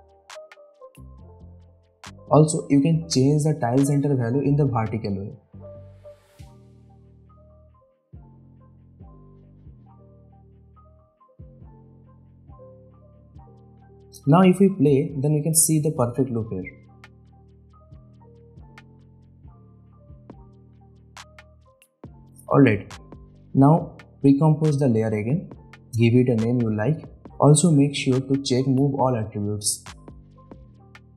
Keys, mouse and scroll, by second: 0.1-1.3 drag, 1.9 space, 2.0-2.6 click, 2.4 space, 5.5-7.3 drag, 13.0 space, 20.3 space, 20.6 click, 23.9 right click, 24.6 click, 25.5-27.6 typing, 28.6 click.